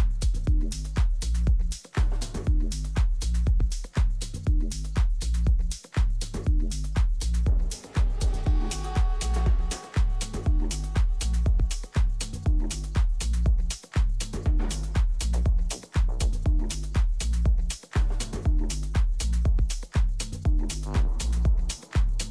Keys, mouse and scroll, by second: 0.0-1.9 right drag, 1.0 e, 4.0 e, 5.3 e, 6.7 e, 8.6-9.9 middle drag, 10.3 middle click, 11.6-13.5 drag, 12.1 middle click, 13.1 a, 13.5-15.3 right drag, 15.3 g, 18.9-20.7 middle drag.